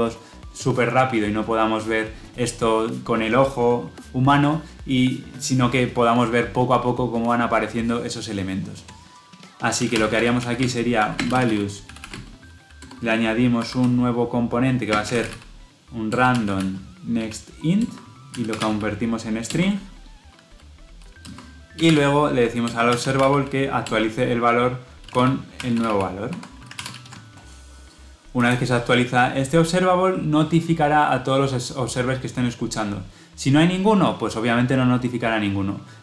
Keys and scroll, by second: 16.0 Return, 26.6 ctrl+alt+l, 28.7 ctrl+alt+o.